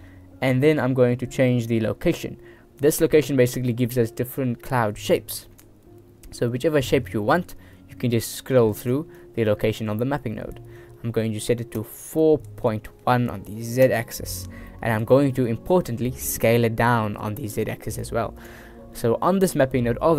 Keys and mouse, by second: 2.9-5.6 drag, 6.4-8.9 drag, 9.3 click, 11.9-14.0 drag, 14.8 middle click, 17.5 click.